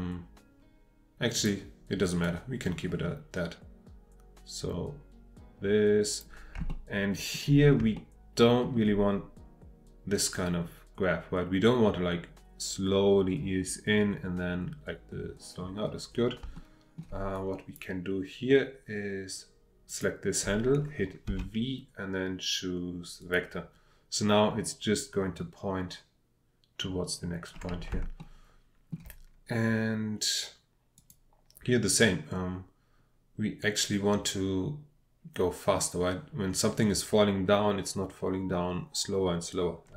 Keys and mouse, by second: 1.3 drag, 2.2-6.2 drag, 6.8 shift+middle click, 8.0 shift+middle click, 16.4 shift+middle click, 17.3-17.7 drag, 19.9 click, 21.3 v, 27.9-29.0 shift+middle drag, 31.0 click.